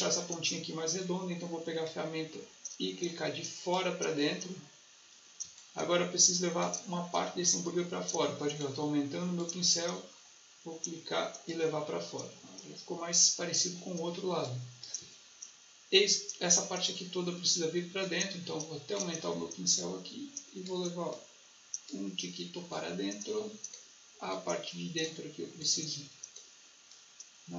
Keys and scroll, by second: 14.2 space.